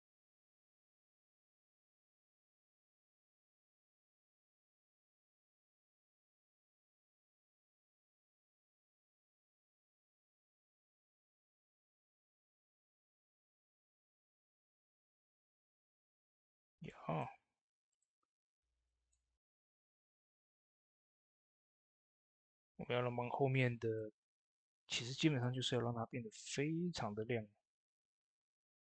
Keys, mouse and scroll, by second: 0.8 click, 0.8 click, 3.8-10.1 drag, 3.8 typing, 12.1 click, 12.2-20.8 drag, 21.0-28.9 drag.